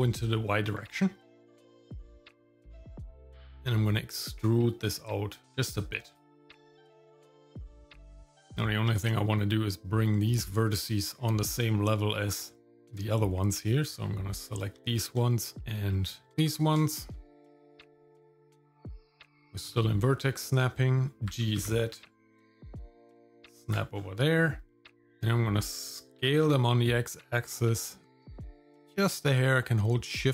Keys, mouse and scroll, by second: 6.2 shift+middle click, 8.6 Tab, 12.4 shift+middle click, 13.6 click, 14.5 ctrl+click, 15.3 shift+middle click, 15.7 shift+middle click, 15.7 scroll down 2, 16.3 ctrl+shift+click, 16.7 shift+middle click, 20.0-20.5 scroll up 3, 21.3 g, 23.9-24.3 scroll down 2, 24.3 middle click, 24.7 scroll down 1, 25.1 middle click, 26.2 s.